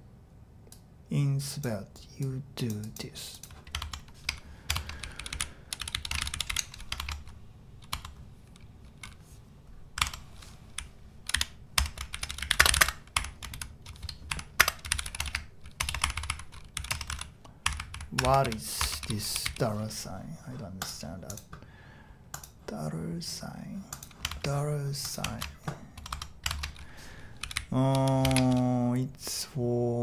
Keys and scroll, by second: 3.8 shift+Tab, 4.7 shift+Tab, 4.7-7.0 typing, 7.0 shift+Tab, 7.9 Tab, 10.5-19.9 typing, 15.8 Return, 15.9 Return, 18.3 Escape, 24.3 shift+BackSpace, 25.3 shift+q, 26.0 Tab, 26.1 Tab, 27.3-28.4 typing.